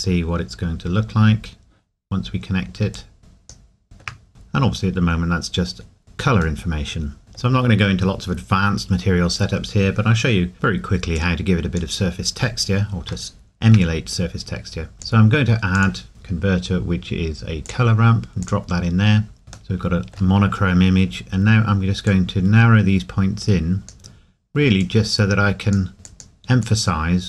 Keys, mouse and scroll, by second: 2.9 click, 3.0 click, 3.8 shift+middle click, 4.3 scroll up 1, 6.6 middle click, 11.2 click, 13.8 scroll down 1, 14.9 click, 20.4 scroll up 1, 22.1 click.